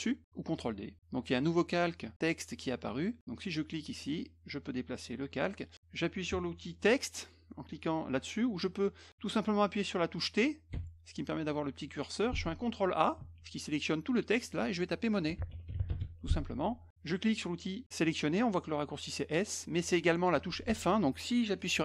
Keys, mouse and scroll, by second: 4.0-5.7 drag, 10.7 t, 13.2 ctrl+a, 15.0-16.0 typing.